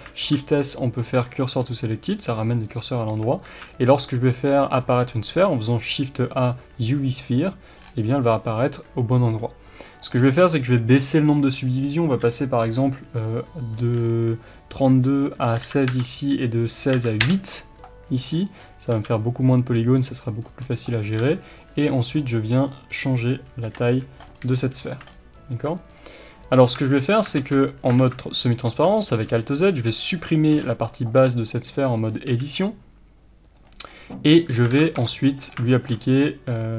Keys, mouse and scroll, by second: 0.1 shift+s, 2.5 middle click, 3.4 shift+a, 7.7-8.2 scroll down 1, 9.9-20.4 drag, 17.6 Return, 18.2-18.5 scroll down 1, 18.5 scroll up 1, 18.9 s, 20.6 scroll up 1, 21.2 s, 22.0 click, 22.2-25.9 middle drag, 23.6 KP_1, 24.3 scroll up 1, 25.1 scroll up 1, 25.5 s, 25.9 click, 26.7 Tab, 27.3 alt+z, 28.0 alt+a, 28.6 b, 31.4 right click, 32.2 x, 34.3-36.7 middle drag, 34.7 alt+z, 34.9 scroll down 1, 34.9 Tab, 36.0 scroll up 1.